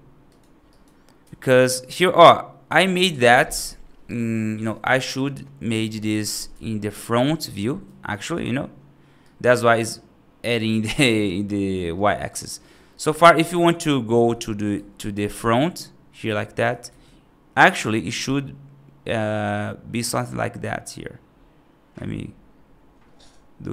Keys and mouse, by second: 0.6 right click, 1.5 `, 7.7 F2, 9.1-9.4 right drag, 12.1 click, 12.8 click, 13.4 r, 14.9 right click, 15.1 `, 16.5 r.